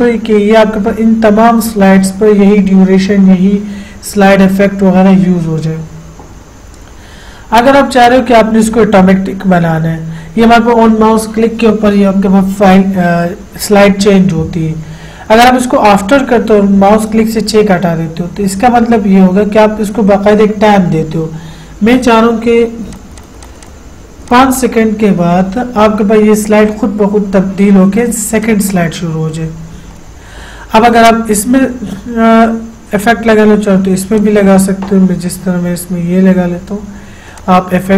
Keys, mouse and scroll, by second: 16.4 click, 23.1 click, 28.7 click, 34.4 click, 37.6 click.